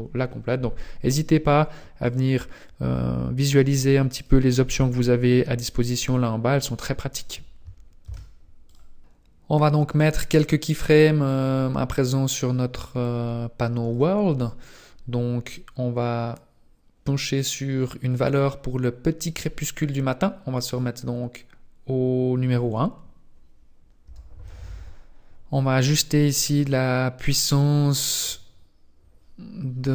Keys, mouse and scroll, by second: 13.1 click, 20.8 click, 26.3 click, 27.7-29.2 scroll up 1.